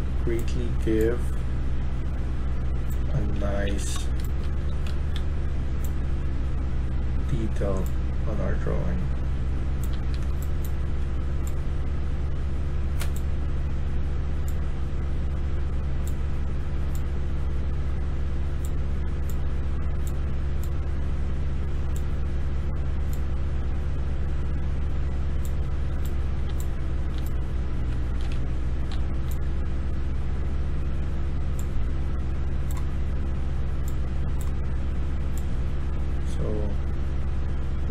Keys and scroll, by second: 3.1-6.3 typing, 9.5-10.7 typing, 25.5-28.8 typing.